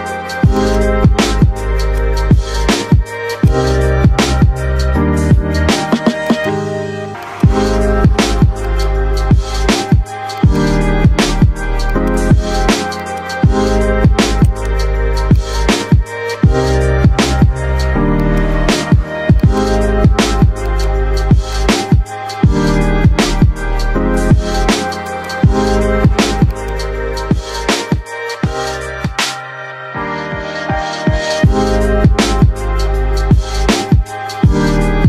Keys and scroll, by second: 7.5 F3, 8.1 Escape, 21.6 F3.